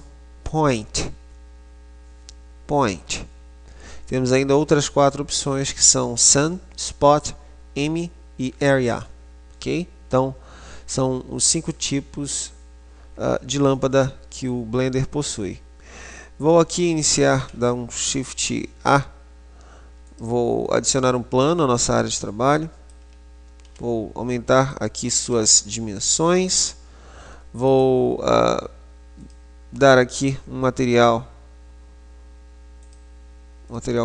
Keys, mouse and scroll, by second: 17.3 shift+a, 21.6 click, 23.8 s, 25.4 s, 27.8 right click, 29.3 click, 32.9 click.